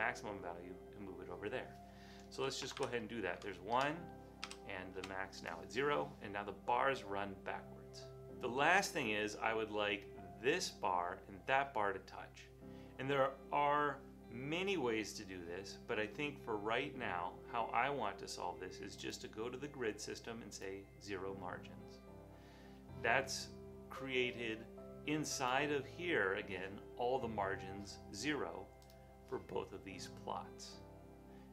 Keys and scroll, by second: 2.7 BackSpace, 2.8 1, 3.4 Tab, 3.8 Tab, 4.5 0, 5.0 Return.